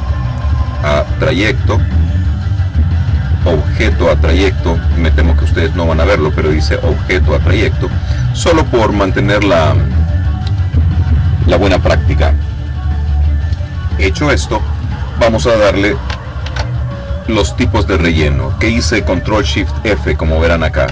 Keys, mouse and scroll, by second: 0.4 click, 7.3 click, 8.9 click, 16.5 ctrl+shift+f.